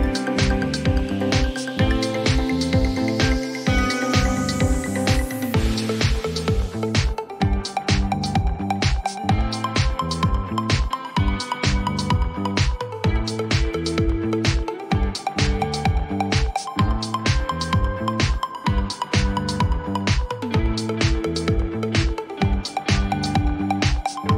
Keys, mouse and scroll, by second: 0.6 click, 0.8-5.0 typing, 3.8 click, 10.1 click, 11.1-12.1 typing, 17.4 click, 18.4 click, 20.2-20.8 scroll, 22.0 click, 22.8 click, 23.7-24.3 scroll.